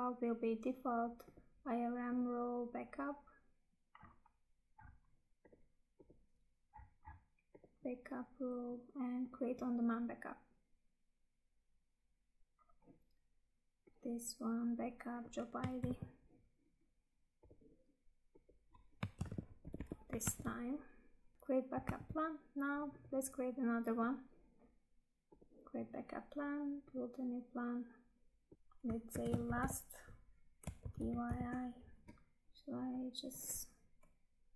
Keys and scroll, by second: 15.7 ctrl+c, 19.1 ctrl+v, 20.4 Tab, 21.9 Tab, 32.4 Tab.